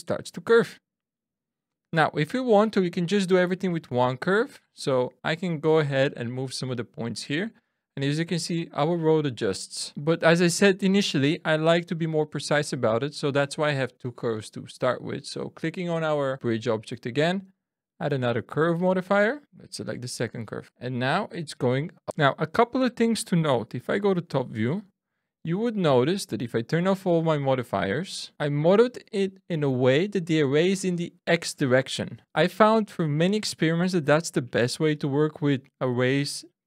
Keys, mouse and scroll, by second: 2.4 click, 4.0 Tab, 4.9 click, 5.9 click, 7.6 middle click, 9.9 ctrl+z, 10.1 Tab, 10.1 middle click, 10.1 scroll down 1, 15.1 click, 17.4 click, 19.4 click, 20.6 middle click, 25.2-26.5 scroll down 1, 26.5 click, 28.3 click.